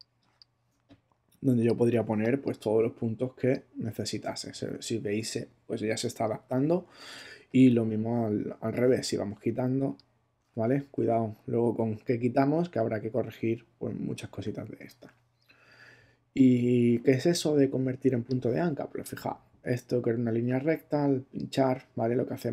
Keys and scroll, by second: 1.9 space, 11.0 super+z, 14.3 super+z.